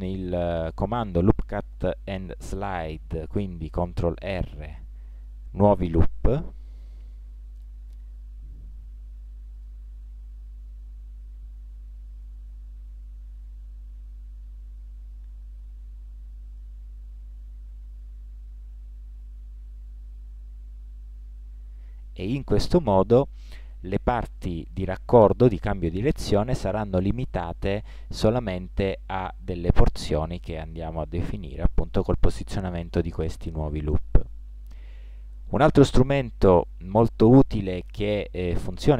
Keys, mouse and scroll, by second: 4.3 ctrl+r, 7.7 ctrl+r, 11.7 ctrl+r, 16.1 ctrl+r, 33.4-35.0 middle drag, 36.1 middle click, 37.4 middle click.